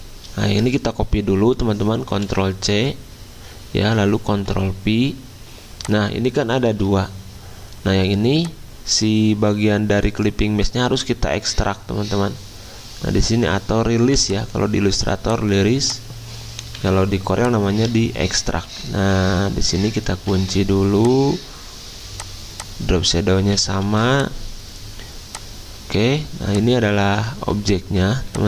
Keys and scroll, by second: 2.3 ctrl+c, 4.3 ctrl+f, 6.7 ctrl+z, 16.7 Delete, 18.5 ctrl+z, 20.2 ctrl+2, 23.9 ctrl+2, 27.3 ctrl+z, 27.5 ctrl+z.